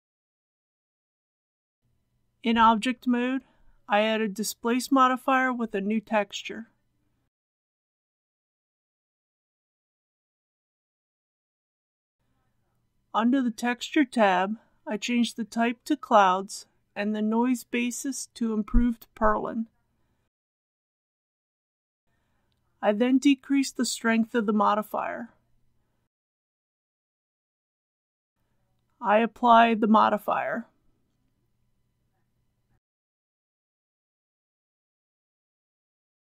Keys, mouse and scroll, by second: 0.6 Tab, 2.4 click, 7.7-8.5 typing, 9.0 Return, 12.4-27.5 drag, 28.5 middle click, 28.9-29.3 scroll up 1, 29.5-30.0 scroll up 1, 30.5-31.2 scroll up 1, 31.2 click, 32.0 KP_Decimal, 32.2 KP_1, 34.8 click.